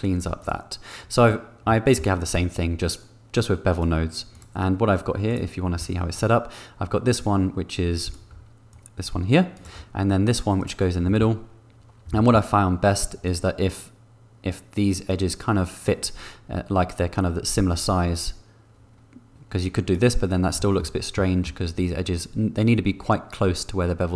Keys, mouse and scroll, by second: 0.4 click, 1.6 middle click, 3.7 click, 8.0 click, 8.8 shift+click, 10.5 click, 11.0 shift+middle click, 12.1 shift+middle click, 13.2 shift+click, 13.4-15.9 shift+middle drag, 18.1-19.9 shift+middle drag, 20.5 shift+middle click, 21.1 middle click.